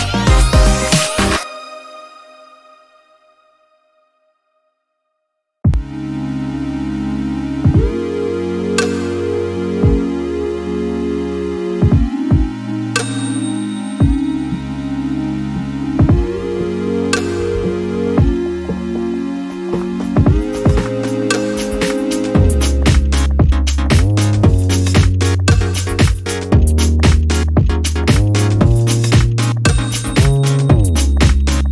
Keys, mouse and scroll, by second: 2.9 click, 3.9 click, 5.6 click, 6.8 ctrl+s, 9.2-9.6 ctrl+scroll, 10.4 ctrl+y, 11.7 ctrl+d, 12.6 ctrl+click, 14.9 click, 16.2 click, 17.2-20.1 drag, 20.8 click, 23.2 Delete, 26.3 shift+click, 27.6 shift+click, 29.0 shift+click, 31.6-31.7 ctrl+drag.